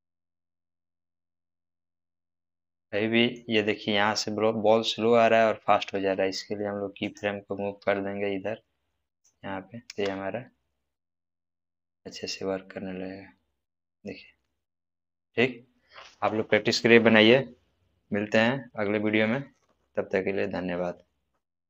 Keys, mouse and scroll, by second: 0.8-1.8 click, 2.1-3.3 middle drag, 5.9 space, 7.0 click, 7.8 g, 9.1 click, 9.8 space, 14.9-15.3 scroll down 1, 15.3-16.5 middle drag.